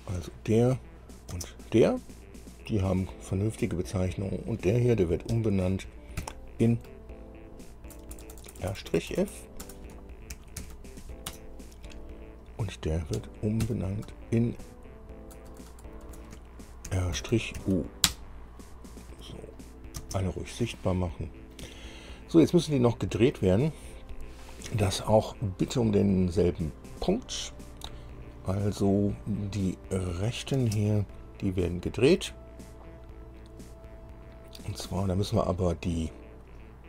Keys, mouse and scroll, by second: 1.3 click, 1.5 space, 4.5 click, 5.5 F2, 6.4 Right, 7.1-7.9 typing, 10.5 shift+r, 10.9 -, 11.3 f, 11.7 Return, 12.7 click, 13.4 F2, 13.9 Right, 14.3 BackSpace, 14.9 BackSpace, 14.9 BackSpace, 15.1 BackSpace, 17.1 shift+r, 17.4 -, 17.8 shift+u, 18.3 Return, 19.8 click, 20.2 space, 21.1 middle click, 22.1 shift+middle click, 22.8-23.8 shift+middle drag, 29.8 click, 30.3 click, 30.8 space, 32.9 click, 34.5-36.8 middle drag.